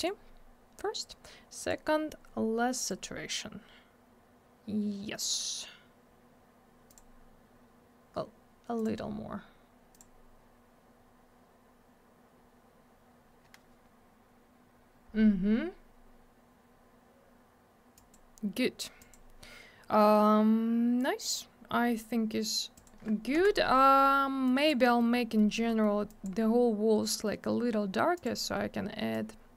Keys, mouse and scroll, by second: 1.6 click, 1.7 click, 2.8 click, 2.9 click, 6.9 click, 7.0 click, 8.7 click, 8.8 click, 9.9 click, 10.0 click, 17.9 click, 18.1 click, 19.0 click, 19.1 click, 22.8 click, 22.8 click, 23.3 m, 24.5 click, 24.8 middle click, 25.0 middle click, 25.1 scroll down 1, 25.3 middle click, 25.5 middle click, 25.7 middle click, 25.8 middle click, 26.1 click, 26.2 double click, 28.1 click, 28.2 click, 29.1 click.